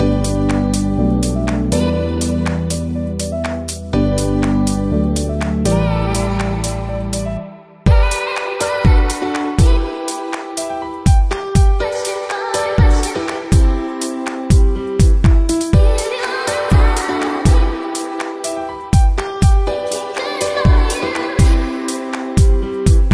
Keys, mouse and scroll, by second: 0.3-2.2 middle drag, 0.3 scroll up 1, 0.4 scroll down 1, 0.5-1.3 scroll up 1, 1.3-1.8 scroll down 1, 1.8-4.1 drag, 4.5-6.2 drag, 5.7 s, 5.7 x, 6.4 Tab, 8.6 e, 12.0-14.3 middle drag, 13.7 Tab, 14.5-15.7 middle drag, 17.7-20.6 drag, 19.9-21.1 middle drag, 21.1-23.1 drag, 22.1-23.1 middle drag.